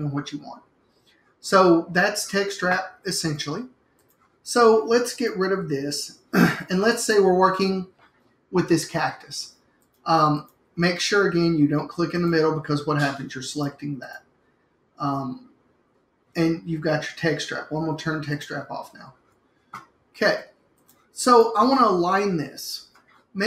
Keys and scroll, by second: 6.0 BackSpace.